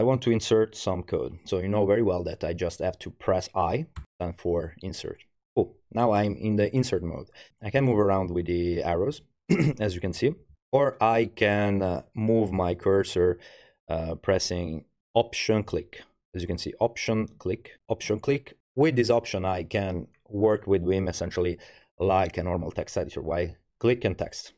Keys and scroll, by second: 7.5 Up, 7.5 Right, 7.8 Right, 8.3 Down, 8.7 Up, 9.1 Up, 9.9 Up, 10.0 Up, 10.2 Up, 10.3 Up, 10.5 Down.